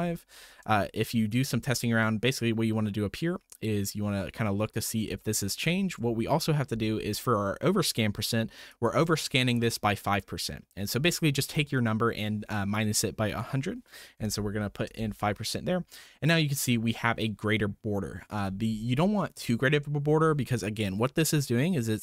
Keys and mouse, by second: 0.8-1.3 shift+drag, 5.2-5.8 shift+drag, 8.7-14.9 drag, 16.0-16.6 middle drag.